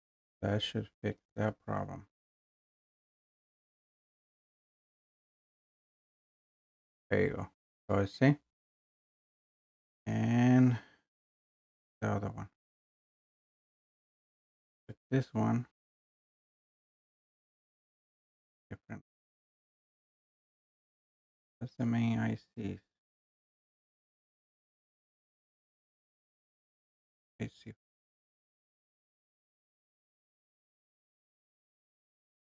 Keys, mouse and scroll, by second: 3.0 click, 4.2 click, 5.3 click, 12.8 click, 14.8 click, 19.4 click, 21.0 click, 21.1 click, 21.9 scroll, 22.9-23.7 scroll, 25.2 scroll, 25.8-26.2 scroll, 27.1 click, 29.2 click, 29.4 click.